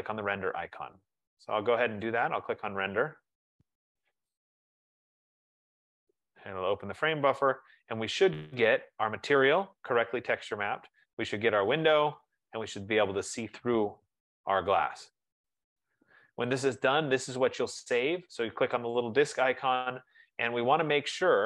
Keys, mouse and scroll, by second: 2.5-7.7 drag, 11.2 F15, 19.3-21.4 drag.